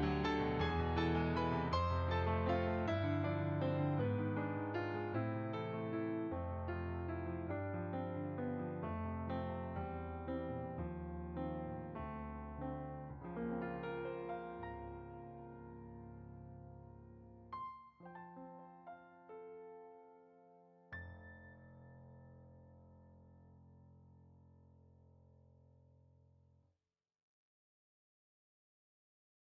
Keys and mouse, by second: 0.8 middle click, 2.7 click, 7.1 click, 7.7 click, 14.7 click, 14.9 middle click, 15.7 click.